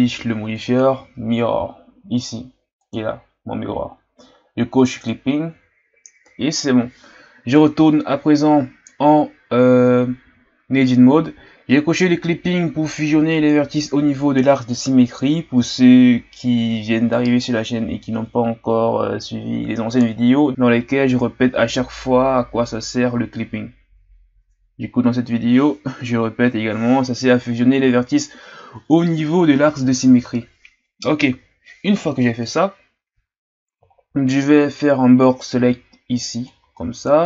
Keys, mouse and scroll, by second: 2.9 click, 5.0 click, 7.6 Tab, 10.5-11.4 shift+scroll down 2, 11.4-14.4 ctrl+scroll up 2, 20.5-21.9 scroll down 4, 22.7-24.1 scroll down 1, 24.1-25.1 shift+scroll up 2, 28.1-29.3 shift+scroll up 1, 29.3 shift+scroll up 1, 33.9 shift+scroll down 1, 35.2 Right, 35.2 right click, 35.5 b.